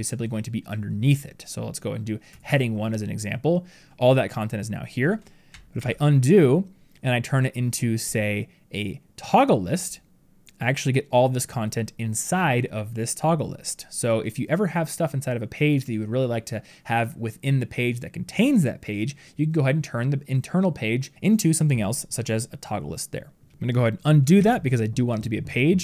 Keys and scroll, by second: 5.6 ctrl+z, 24.2 ctrl+z.